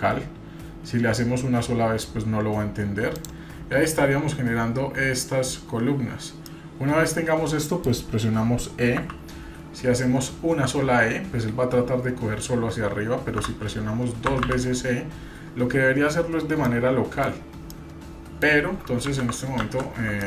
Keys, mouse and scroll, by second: 6.5-7.9 middle drag, 9.0 e.